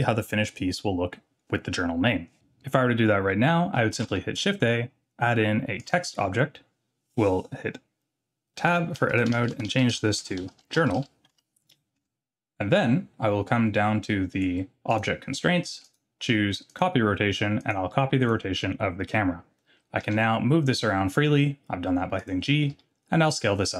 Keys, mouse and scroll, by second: 4.0 shift+a, 8.6 Tab, 9.0-11.0 typing, 11.3 Return, 12.0 Tab, 14.9 click, 15.8-16.8 drag, 17.6-18.3 drag, 20.0 g, 22.7 s.